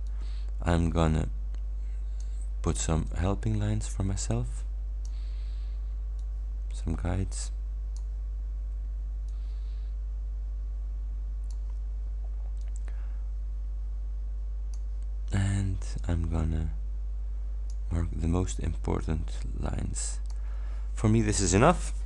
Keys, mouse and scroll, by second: 0.2-2.5 drag, 3.2-5.3 drag, 6.2-8.2 drag, 9.4-11.8 drag, 12.7-15.0 drag, 16.0-18.0 drag, 18.6-20.6 drag.